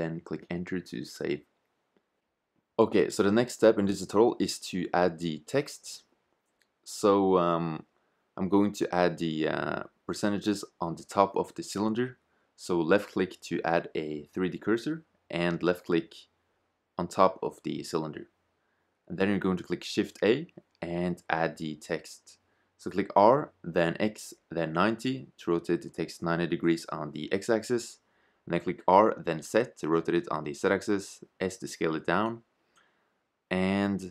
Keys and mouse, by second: 3.4-6.0 drag, 8.2-11.4 drag, 11.4 shift+z, 18.7 shift+a, 23.3 r, 26.4 r, 29.3 s, 32.8 g.